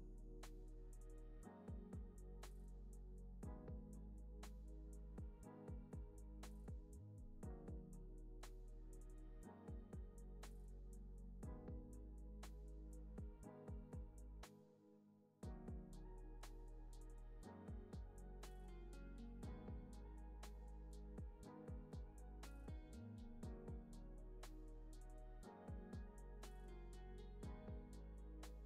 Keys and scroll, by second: 3.5 Left, 10.8 p, 13.2 z, 14.1 x, 15.3 z, 21.1 z, 21.7 x, 22.3 z, 22.8 x, 24.9 p.